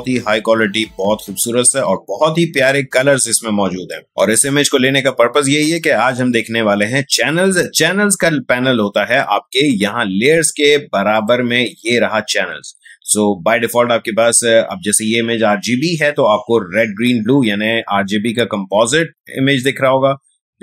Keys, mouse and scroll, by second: 11.1 click.